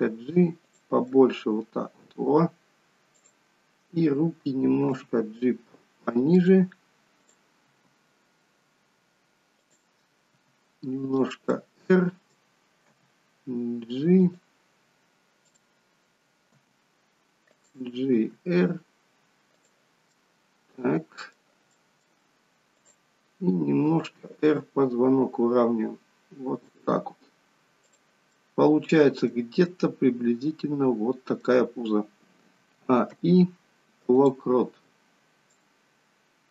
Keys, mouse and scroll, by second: 0.9 middle click, 3.0 click, 4.8 g, 7.4 click, 7.7 g, 10.3 r, 11.4 middle click, 12.8 g, 15.3 click, 16.5 g, 18.1 r, 20.0 middle click, 21.6 middle click, 22.7 click, 23.8 r, 27.8 click, 28.3 middle click, 29.5 middle click, 32.5 a, 33.0 i, 35.8 click.